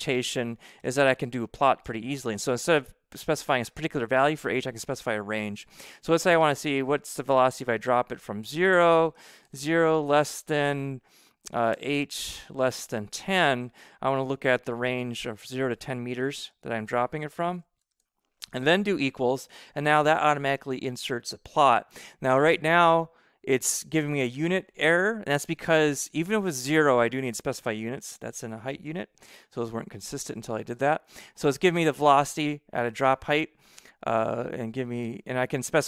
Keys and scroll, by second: 0.7 Return, 1.8 v, 2.2 shift+9, 7.4 0, 8.6 ,, 9.1 BackSpace, 9.4 shift+,, 11.6 h, 12.2 shift+,, 13.0 1, 16.2 [, 16.4 m, 17.3 ], 17.9 shift+0, 18.9 =, 27.4 [, 28.0 m, 28.7 ].